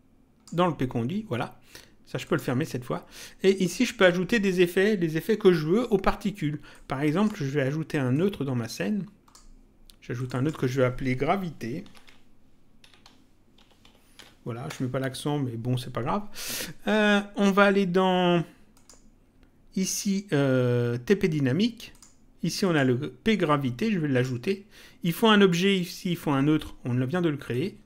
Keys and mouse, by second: 2.2 click, 3.6 click, 6.6 click, 8.1 click, 10.1 click, 11.6-14.6 typing, 14.7 Return, 18.7 click, 21.9 click, 27.4 click.